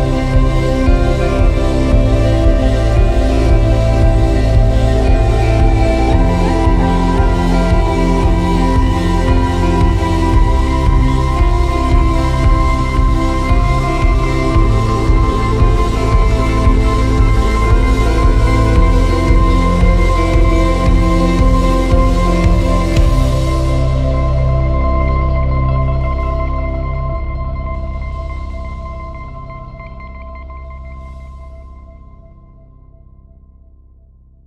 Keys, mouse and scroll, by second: 0.0 t, 1.5 ctrl+KP_Add, 1.8 ctrl+KP_Add, 2.8-3.2 scroll down 2, 3.2 alt+z, 3.8-5.1 middle drag, 5.0 scroll down 1, 5.2-7.7 middle drag, 6.1 alt+z, 7.7 ctrl+KP_Subtract, 8.5 alt+z, 10.3 alt+z, 12.6 Tab, 14.8 click, 16.4 Tab, 17.8-18.5 drag, 24.3-24.8 scroll down 3, 24.8-26.9 scroll up 4, 26.9-30.3 drag, 31.1 click, 32.1-34.4 drag.